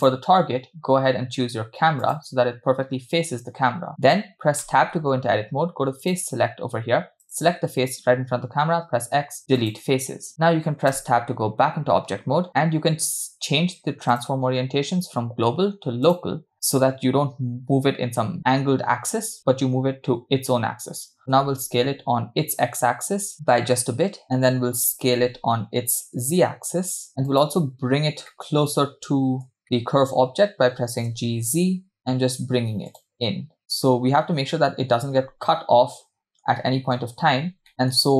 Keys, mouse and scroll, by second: 0.0 drag, 4.7 Tab, 6.0 click, 7.2 click, 8.9 x, 10.9 Tab, 14.1-16.5 drag, 21.5 s, 24.9 s, 28.3-30.6 middle drag, 31.1 g, 33.1-35.0 middle drag, 35.2-35.6 scroll up 5, 35.6-36.5 middle drag, 36.6-36.9 scroll down 2, 37.2-37.7 shift+scroll up 4, 37.7-38.0 middle drag, 37.7 scroll down 2.